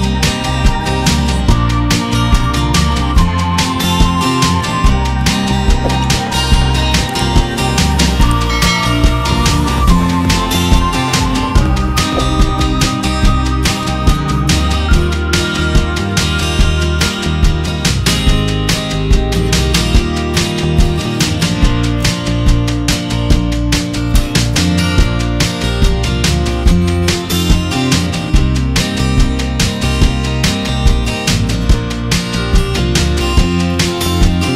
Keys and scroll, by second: 2.6 ctrl+alt+i, 10.5 F7, 11.2 F7, 11.6 p, 19.6 ctrl+z, 20.8 ctrl+alt+z, 25.9 ctrl+z.